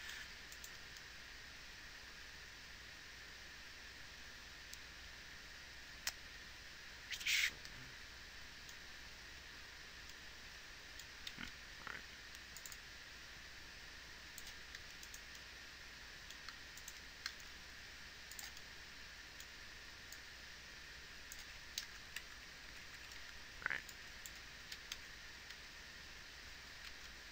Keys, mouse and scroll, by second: 11.7 shift+d, 17.8 a, 17.8 shift+d, 22.2 shift+KP_0, 22.6 shift+Left, 22.9 shift+Right, 23.1 shift+Left, 23.4 shift+Right, 25.0 z, 25.4 alt+a, 26.1 z.